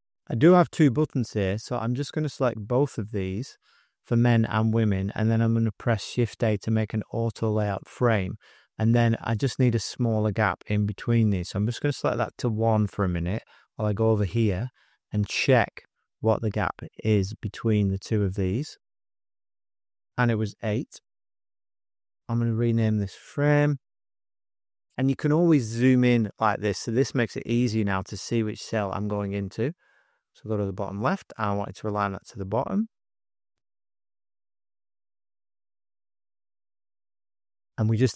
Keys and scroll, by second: 6.3 shift+a, 11.6 1, 12.1 Tab, 13.1-14.0 typing, 19.3 super+o, 19.3 super+-, 19.4 space, 19.5 space, 19.5 z, 20.7 8, 21.1 Tab, 23.1-24.8 typing, 32.6 alt+s, 33.7 super+0, 34.0 super+-, 35.3 space, 35.7 space, 35.8 space.